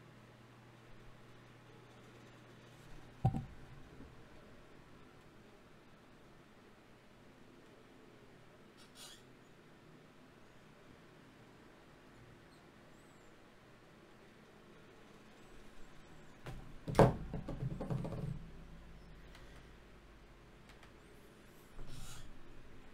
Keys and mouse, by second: 0.8 z, 3.1 KP_Divide, 4.1 Tab, 4.8 ctrl+Tab, 7.0 g, 8.4 ctrl+Tab, 9.4 click, 10.0 f, 14.2-17.8 right drag, 19.9 ctrl+Tab, 20.7 click, 22.3-22.9 right drag.